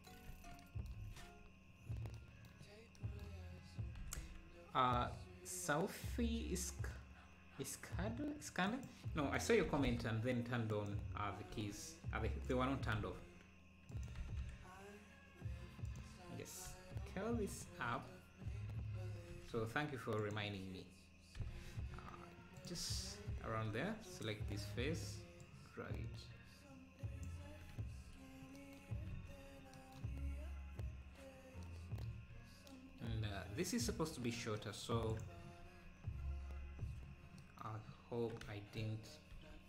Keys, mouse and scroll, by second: 0.3 ctrl+s, 1.7-2.1 scroll up 1, 2.7-3.0 scroll up 1, 4.0 g, 11.5 d, 12.4 click, 13.0 s, 14.2 g, 16.7 s, 17.8-18.4 scroll down 1, 18.4-19.4 scroll down 1, 19.4 s, 23.5 Tab, 24.2-27.5 drag, 27.5 Tab, 28.4 scroll up 1, 29.2 ctrl+s, 34.5 Tab, 34.5-35.1 scroll up 8, 35.1 click, 35.8 Tab, 36.5 scroll up 4, 38.3 scroll up 3.